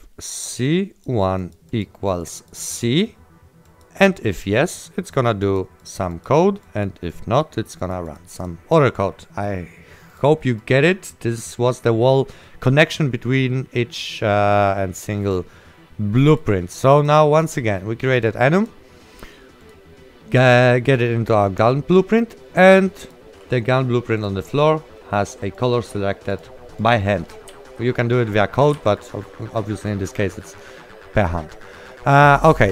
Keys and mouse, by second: 0.1 click, 16.4 click, 23.1 click, 27.4-29.5 typing, 27.4 right click, 28.9 right click.